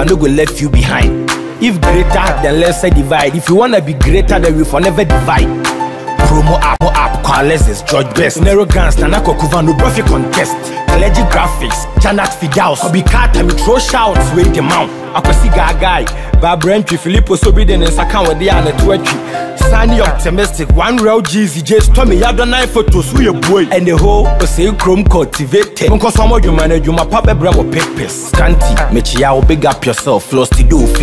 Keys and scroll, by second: 12.3 ctrl+-, 12.8 ctrl+=, 15.7 ctrl+-.